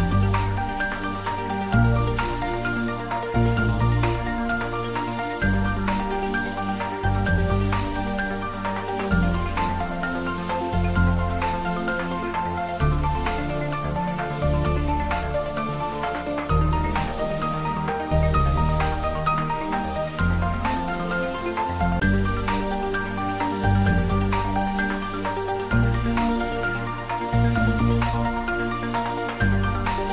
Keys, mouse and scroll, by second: 0.6 click, 1.8 g, 4.2 click, 4.6 scroll down 1, 5.0-5.9 middle click, 5.9 scroll up 1, 14.3 shift+Num_Lock, 14.3 scroll up 1, 14.4 shift+a, 17.4 click, 18.1 scroll down 1, 18.7-19.3 middle drag, 20.0 scroll down 1, 20.4-21.7 middle drag, 22.7 scroll up 1, 26.6-27.6 scroll down 1, 27.6-30.1 typing, 27.7 middle click.